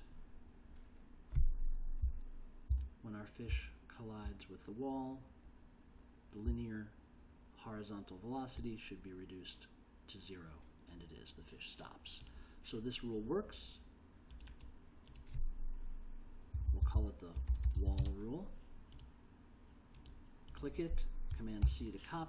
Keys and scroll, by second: 2.2 l, 2.8 k, 3.7 l, 6.6 j, 16.7 Left, 17.4-18.4 typing, 21.8 super+c.